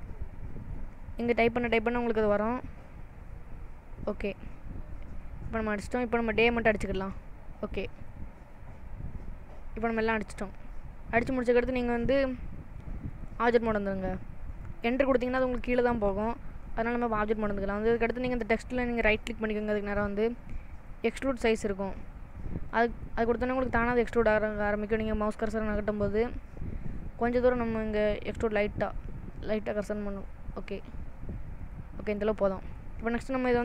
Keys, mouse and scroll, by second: 0.0-1.4 typing, 3.4 middle click, 5.6 shift+middle click, 5.7 scroll down 2, 6.4-7.0 scroll down 1, 7.0 space, 7.8 shift+d, 8.4 a, 8.9 y, 12.4 middle click, 13.7 click, 15.8 middle click, 17.7 middle click, 17.7-18.1 scroll up 2, 19.1 right click, 32.2 click, 32.7 middle click, 33.3 click.